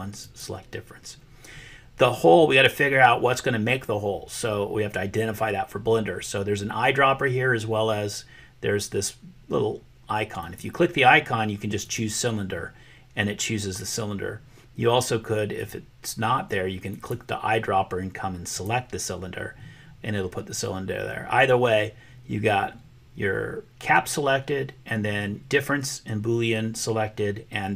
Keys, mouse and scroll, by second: 0.2 click, 10.4-12.0 drag, 17.0 click.